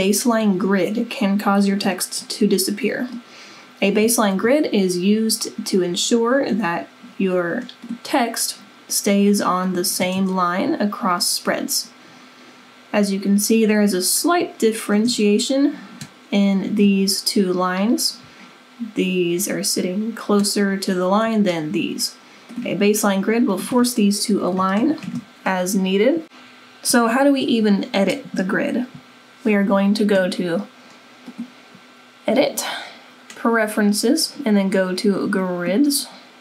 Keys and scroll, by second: 24.3 Delete.